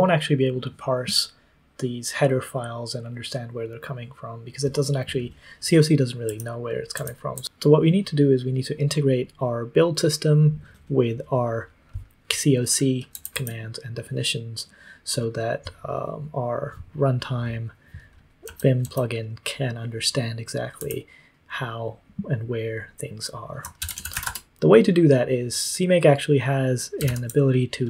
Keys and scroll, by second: 6.2 k, 6.9 j, 7.3 j, 13.1 j, 13.3 j, 18.4 k, 18.8 k, 20.7 j, 23.7-24.6 typing, 27.0 super+l.